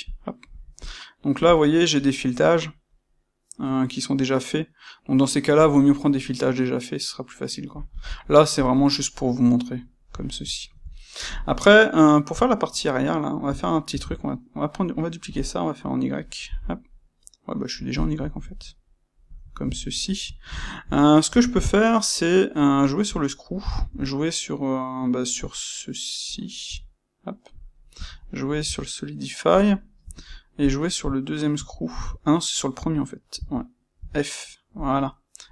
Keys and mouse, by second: 0.0 click, 8.5 click, 9.1-13.8 middle drag, 13.8 shift+d, 17.9 click, 18.1-21.2 ctrl+middle drag, 21.2 space.